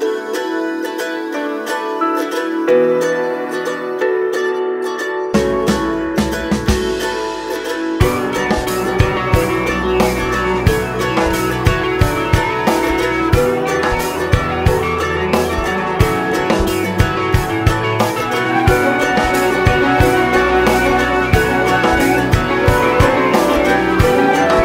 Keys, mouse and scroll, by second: 0.5 click, 1.3 KP_Divide, 1.5 scroll up 1, 1.8 `, 3.2 scroll down 2, 3.3 alt+a, 3.4 `, 4.1 click, 4.7-7.9 drag, 8.3 scroll up 1, 9.0 click, 9.7 click, 10.5 click, 10.8 `, 11.3 click, 12.5 click, 13.1-14.2 drag, 17.3 click, 18.3 click, 18.8-21.6 drag, 19.8 `, 23.3-24.6 drag.